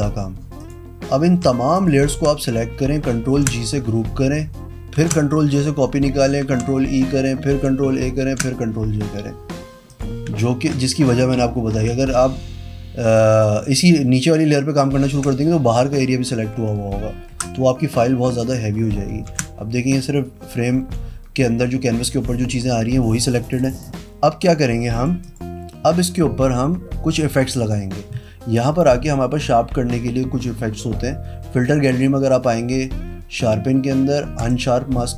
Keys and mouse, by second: 0.5 click, 1.7 shift+click, 3.3 ctrl+g, 4.9 ctrl+j, 6.3 ctrl+e, 7.5 ctrl+a, 8.2 ctrl+j, 9.8 click, 15.0 ctrl+t, 16.5 Escape, 17.3 Pause, 18.3 click, 19.2 ctrl+t, 20.7 Escape, 25.2 click, 27.5 click, 34.3 click.